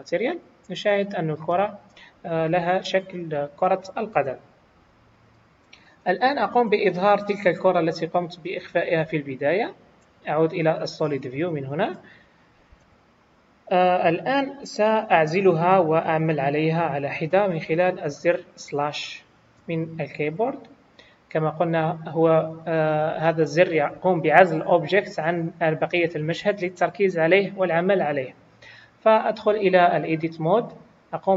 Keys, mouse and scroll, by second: 1.1 middle click, 2.5 KP_1, 8.4 click, 9.5-10.8 scroll down 1, 10.8 click, 11.7 click, 12.8 KP_1, 13.9-14.7 scroll down 2, 29.4 Tab.